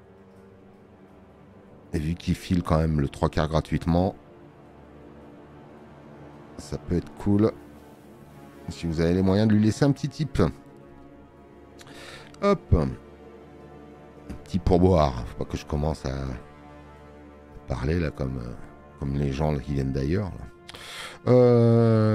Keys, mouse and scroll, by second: 2.1 space, 2.3 click, 8.1 scroll.